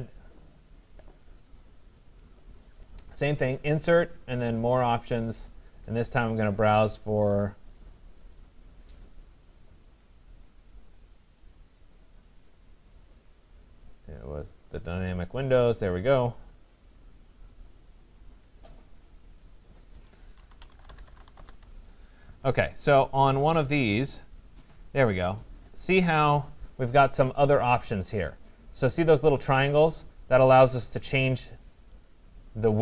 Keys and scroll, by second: 21.3 Return.